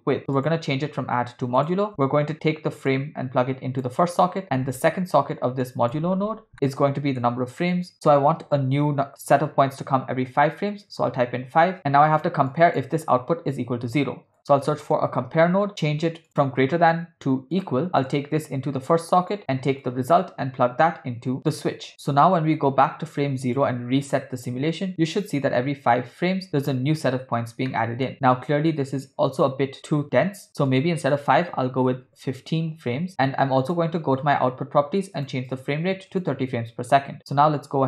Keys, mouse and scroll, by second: 0.4-1.8 drag, 2.9-4.0 drag, 4.4-4.8 drag, 5.7 click, 6.7 ctrl+middle click, 7.7 middle click, 7.9-11.0 drag, 11.8 click, 12.5 click, 13.7 shift+a, 16.3-17.7 drag, 18.0-19.0 drag, 19.3 click, 19.8-21.9 drag, 21.9 ctrl+middle click, 23.2 click, 24.0 space, 27.7 middle click, 30.1 space, 30.7-32.1 drag, 33.6 click, 35.2-36.3 drag, 37.2 click, 37.6 space.